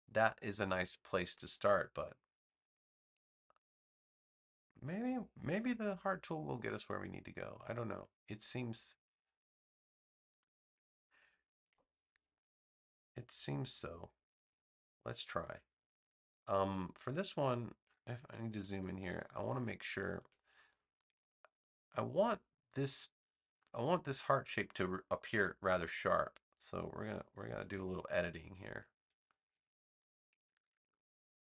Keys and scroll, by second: 11.6 super+Return, 18.8 super+=, 19.9 space, 25.2 BackSpace.